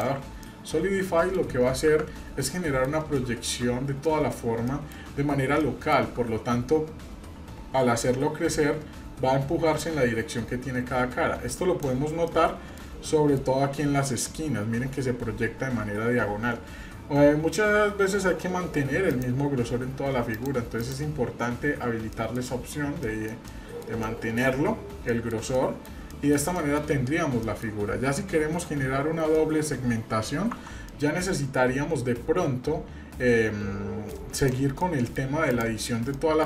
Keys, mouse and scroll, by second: 0.4 middle click, 0.9 scroll up 1, 1.9 KP_Divide, 2.4-2.9 middle drag, 3.1-3.6 shift+middle drag, 3.7-4.1 scroll up 1, 4.1 shift+middle click, 4.6-5.0 shift+middle drag, 5.1-5.4 scroll up 1, 5.6-6.1 shift+middle drag, 6.2 scroll up 1, 6.7-8.2 scroll down 1, 9.8-11.9 drag, 12.2-12.8 shift+middle drag, 13.1-14.5 shift+middle drag, 19.1 click, 20.3 click, 20.8 click, 21.4-22.1 scroll down 2, 22.1 middle drag, 22.3-22.6 scroll down 2, 23.0-23.9 shift+middle drag, 23.0 scroll down 1, 24.0-24.4 middle drag, 24.5-24.9 scroll up 2, 25.1-25.5 shift+middle drag, 25.5-25.9 middle drag, 26.1-26.7 shift+middle drag, 27.1 scroll down 1, 27.4 middle click, 29.3-30.3 middle drag, 30.5 Tab, 30.9-34.1 middle drag, 34.3 click, 34.8 middle click, 35.5 click, 36.1 middle click.